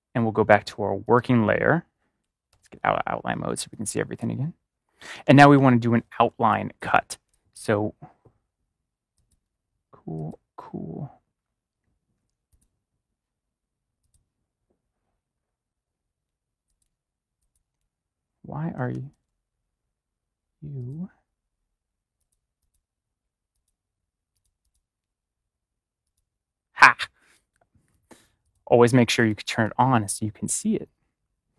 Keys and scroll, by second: 2.4 ctrl+y, 3.5 ctrl+y, 3.6 space, 4.0 space, 5.0 ctrl+=, 6.3 space, 18.7 ctrl+-.